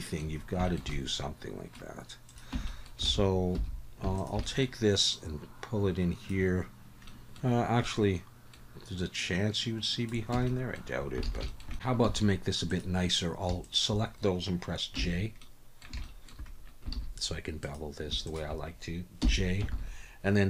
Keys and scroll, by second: 2.5 Tab, 3.1 alt+a, 3.6 2, 10.3 Tab, 11.3 alt+a, 12.0 1, 15.0 j, 16.9 alt+a, 19.2 j, 19.7 alt+a.